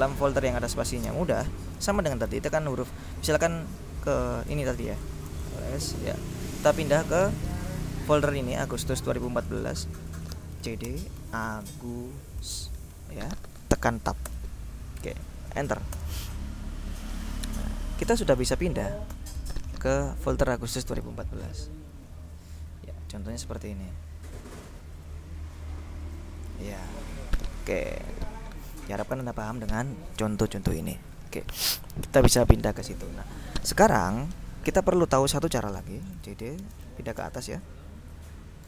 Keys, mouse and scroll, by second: 1.1 space, 4.5-6.1 typing, 8.5 click, 9.5 click, 10.4-12.5 typing, 14.3 Tab, 16.0 Return, 18.3-19.4 typing, 21.3 click, 23.4 click, 26.5 click, 28.0 click, 29.4 alt+Tab, 32.7 click, 35.9-36.9 typing, 37.3 Return, 38.5-38.6 typing.